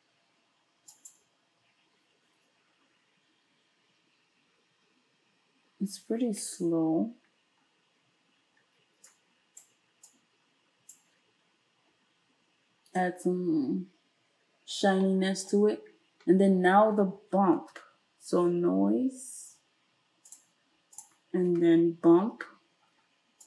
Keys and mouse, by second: 1.1-9.1 ctrl+shift+middle drag, 9.1-21.1 drag, 17.6 space, 21.1-23.4 middle drag, 21.5 space.